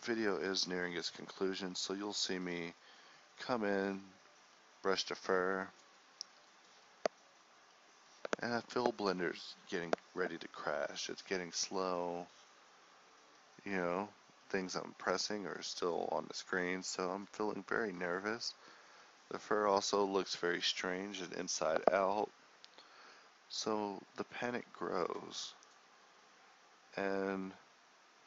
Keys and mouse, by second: 0.2 drag, 0.4 middle click, 1.0 click, 1.7-6.0 middle drag, 6.0-7.4 drag, 10.0 ctrl+s, 11.4 ctrl+s, 13.2-26.5 drag.